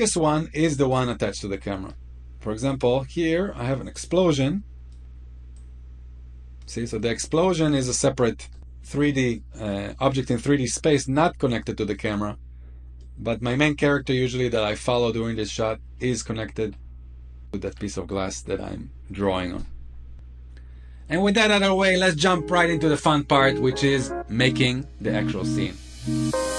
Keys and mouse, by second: 0.6-1.2 middle drag, 3.6 click, 5.3-6.4 drag, 6.6-7.1 middle drag, 7.6-8.1 shift+middle drag, 8.4 middle click, 10.8-11.6 shift+middle drag, 12.7-15.4 drag, 15.8-16.3 middle drag, 16.6-17.3 shift+middle drag.